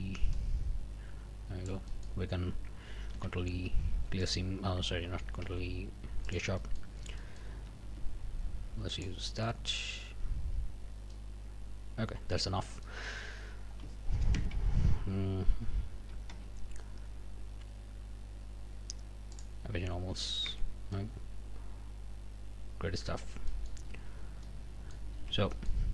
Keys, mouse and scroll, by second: 0.3-2.2 drag, 3.1 ctrl+e, 4.2 click, 5.3 ctrl+e, 6.3 click, 7.2 click, 7.8 s, 8.9 click, 11.1-12.5 drag, 12.5 scroll up 2, 12.8 middle click, 14.3 ctrl+KP_Add, 16.3 ctrl+q, 19.3 middle click, 19.7 scroll down 2, 20.2 alt+a, 20.5 alt+Tab, 20.9-22.1 alt+scroll up 1, 22.1-23.3 drag, 23.3 Tab, 23.5 click, 23.7 middle click, 24.2 scroll up 1, 24.4 middle click, 25.1 a, 25.5 middle click.